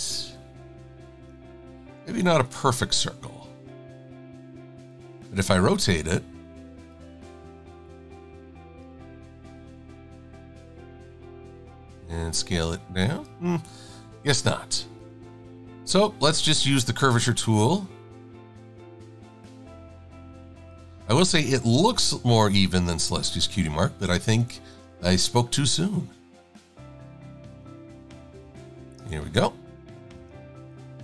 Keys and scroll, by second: 2.2 super+=, 2.6 super+=, 4.1 e.